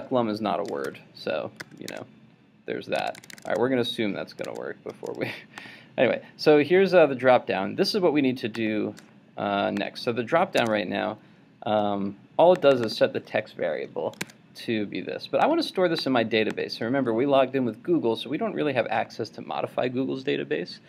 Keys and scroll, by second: 1.6 super+s, 1.9 super+Tab, 4.5 super+Tab, 10.6 super+Tab, 14.2 super+Tab.